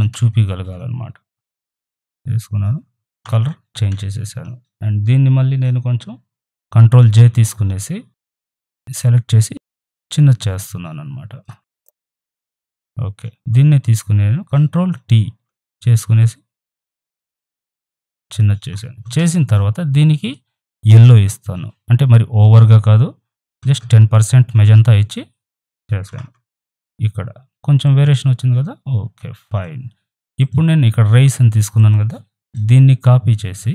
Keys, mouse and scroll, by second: 6.8 ctrl+j, 8.2 ctrl+t, 9.3-11.7 alt+shift+drag, 11.7 ctrl+z, 12.1 right click, 12.2-13.3 drag, 13.3 ctrl+z, 14.9 ctrl+t, 16.2-20.2 alt+shift+drag, 22.5 click, 24.7 Tab, 25.5 Return, 27.8-30.4 drag, 31.5 right click, 31.7-33.7 drag.